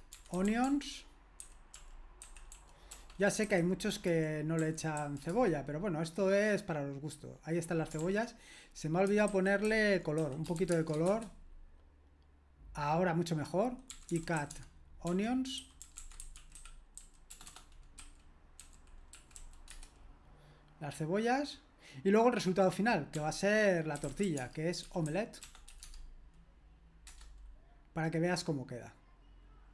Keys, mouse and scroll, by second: 0.0-5.0 typing, 5.3 Return, 8.0 ctrl+p, 9.3 alt+b, 9.7 alt+b, 9.9-11.2 typing, 13.7-19.9 typing, 23.1-25.8 typing.